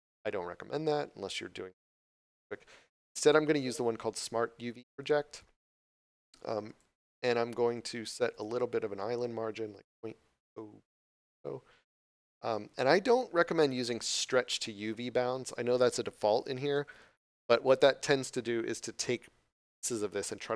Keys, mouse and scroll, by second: 8.3 click, 12.2 click.